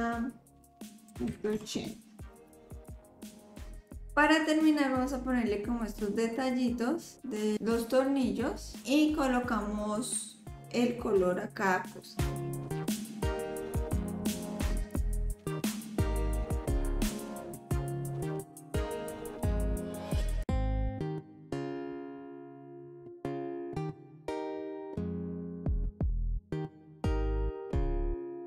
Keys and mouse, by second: 2.8-4.0 drag, 12.5 click, 12.7 click, 13.4 s, 14.3 click, 14.5 click, 15.0 ctrl+s, 15.2 click, 15.9 click, 16.1 click, 16.5 KP_7, 16.7 click, 17.0 click, 17.3 middle drag, 17.6 click, 17.8 click, 18.2 middle drag, 18.5 click, 18.7 middle click, 19.7 shift+click, 19.9 shift+d, 20.6 click, 21.0 click, 21.3 click, 21.6 click, 22.0-22.4 drag, 22.6 middle click, 22.9 click, 23.3 middle click, 23.6 shift+click, 23.6 middle click, 24.0 shift+d, 24.6 middle click, 25.0 click, 25.4 click, 25.4 middle click, 25.4 right click, 25.7 click, 26.4 click, 26.5 s, 27.0 r, 27.7 s, 28.3 s.